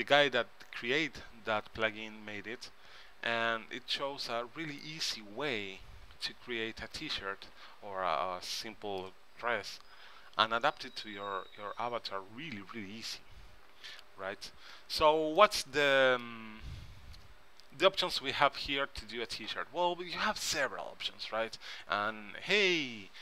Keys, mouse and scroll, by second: 2.8-4.8 middle drag, 6.1-7.8 middle drag, 8.7-10.4 middle drag, 15.5-17.3 middle drag, 18.3 middle click.